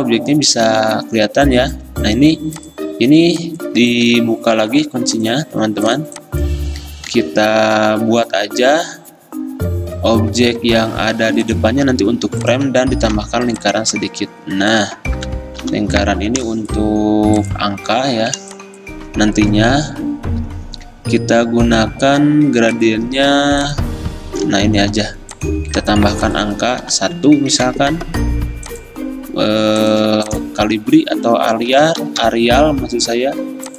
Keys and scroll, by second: 4.0 ctrl+z, 4.8 ctrl+alt+2, 7.2 ctrl+2, 13.3 i, 15.8 i, 18.6 v, 25.9 t, 26.9 1, 27.7 ctrl+a, 31.6-32.8 typing.